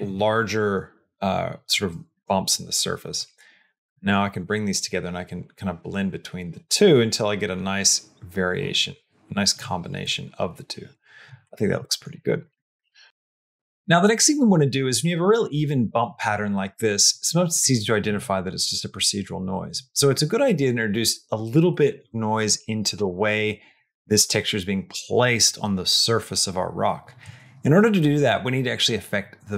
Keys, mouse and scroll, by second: 3.0-9.4 drag, 9.8-11.1 middle drag, 11.3 middle click, 11.6 middle click, 11.9 middle click, 12.3 middle click, 12.5 middle click, 12.9 shift+middle click, 27.8 middle click.